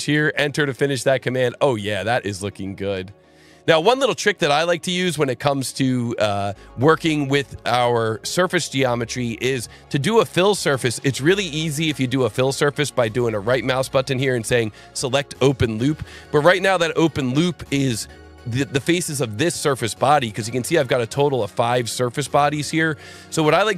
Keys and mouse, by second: 0.1 Return, 7.4 click, 8.8 click, 13.2 right click, 16.1 click, 20.1 click, 21.4 click, 22.9 shift+click.